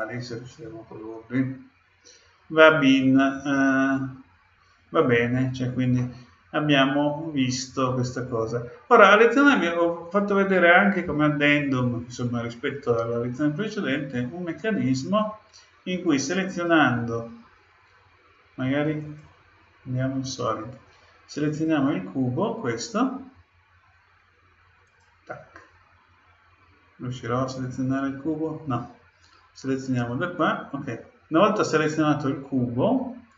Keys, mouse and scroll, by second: 5.9-7.7 middle drag, 7.7 middle click, 16.4-18.3 right drag, 19.0-20.9 drag, 21.4-23.4 right drag, 24.8-26.7 right drag, 27.5-29.4 right drag, 29.8-31.6 drag.